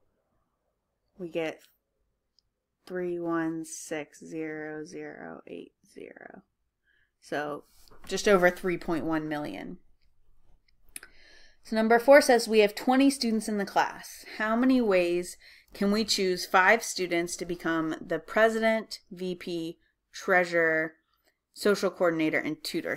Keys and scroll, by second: 1.2-2.0 typing.